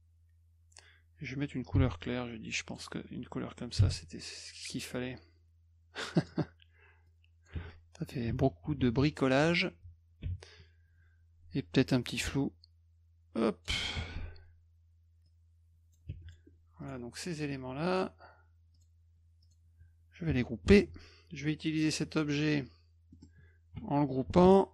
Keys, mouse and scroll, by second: 1.8 d, 2.7 click, 4.4-6.3 drag, 7.1 click, 12.2-13.6 drag, 15.2 click, 16.3 click, 16.8 click, 17.9 shift+click, 18.7 shift+click, 19.4 shift+click, 20.6 ctrl+g, 21.8 click, 23.1 middle click.